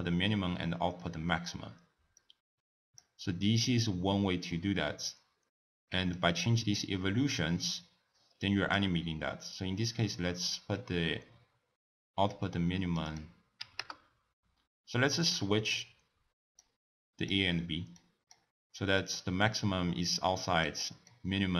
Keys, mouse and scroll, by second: 0.8-2.2 middle drag, 2.2 drag, 4.5-6.2 middle drag, 6.2-9.2 drag, 10.5-15.3 drag, 15.3 middle click, 15.6-16.6 scroll down 1, 16.6 click, 18.0 click, 19.0-21.5 drag.